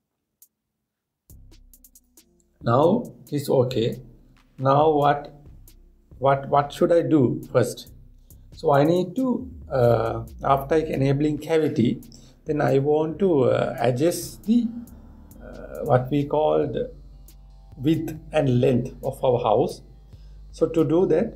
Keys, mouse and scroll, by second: 3.7-5.7 drag.